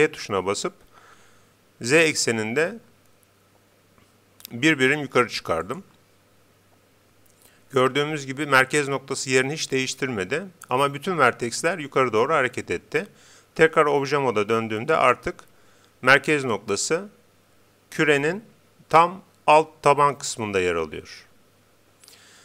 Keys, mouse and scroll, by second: 5.8-7.6 drag, 13.6 Tab, 21.2 g.